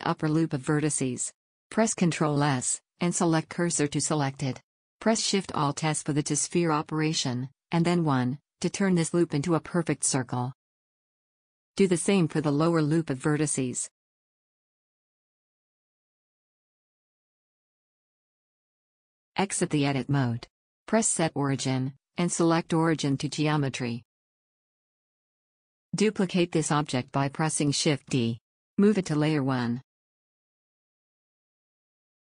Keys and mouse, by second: 0.5 click, 1.2 middle click, 1.8 shift+s, 2.6-5.0 drag, 6.4 alt+shift+s, 10.7 a, 12.3 shift+s, 14.9 alt+shift+s, 19.4 middle click, 19.5 Tab, 26.3 shift+d, 28.9 m, 31.7 click.